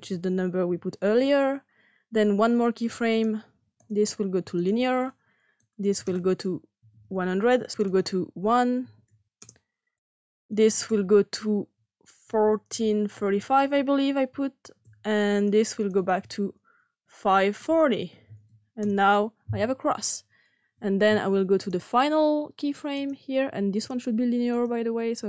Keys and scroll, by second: 0.0-1.2 typing, 6.7 typing, 8.7 !, 9.3 Return, 12.2-13.2 typing, 14.7 Return, 16.9-19.1 typing.